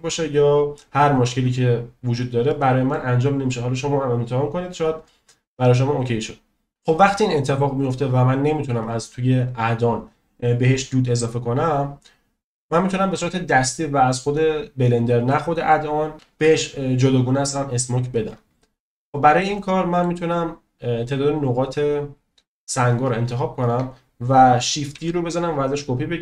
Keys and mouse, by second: 2.5-2.9 middle drag, 12.7-14.1 drag, 19.1 shift+middle drag, 19.5-20.0 middle drag, 21.4-23.0 drag, 25.0 shift+d.